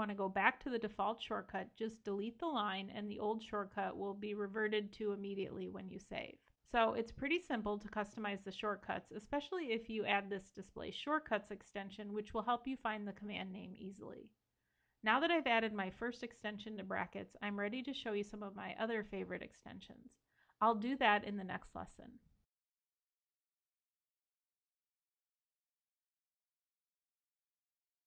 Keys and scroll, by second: 10.2 super+i.